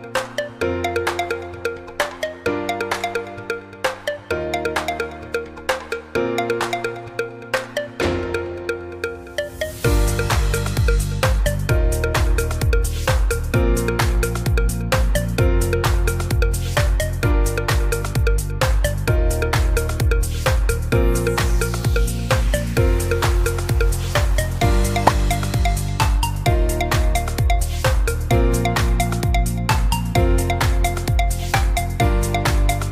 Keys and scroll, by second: 22.4-23.3 typing.